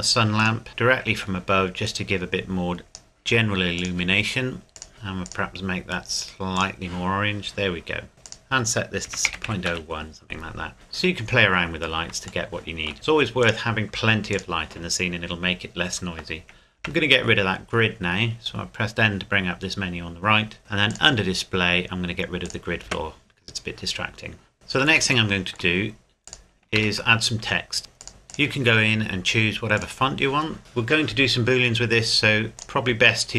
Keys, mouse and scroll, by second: 0.7 middle click, 1.9 click, 4.9 KP_Enter, 5.3 click, 8.1 scroll up 1, 8.8 click, 9.1 KP_Decimal, 9.3 KP_0, 9.5 KP_1, 9.7 KP_Enter, 10.7 click, 11.3 scroll down 1, 12.5 shift+middle click, 13.4 click, 14.8 scroll down 1, 17.7-18.1 scroll down 1, 20.9 click, 22.9 n, 23.5-24.1 scroll down 1, 24.8 click, 25.5 shift+middle click, 25.8-26.3 scroll up 1, 26.3 click, 26.8 shift+a, 28.0 click, 28.7-29.7 scroll down 1, 29.7 click, 32.6 click.